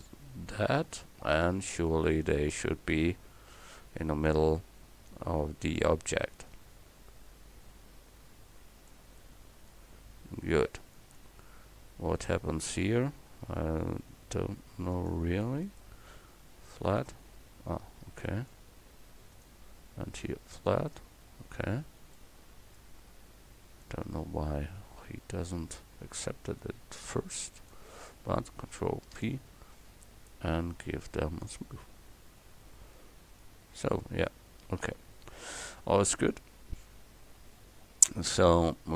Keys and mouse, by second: 3.0 KP_7, 4.3-6.2 drag, 9.3 click, 12.2 right click, 12.7 Tab, 18.1-19.4 drag, 26.5-29.1 right drag, 29.1 ctrl+KP_Add, 32.6 Tab, 33.0 middle drag, 34.7 a, 38.1 right click.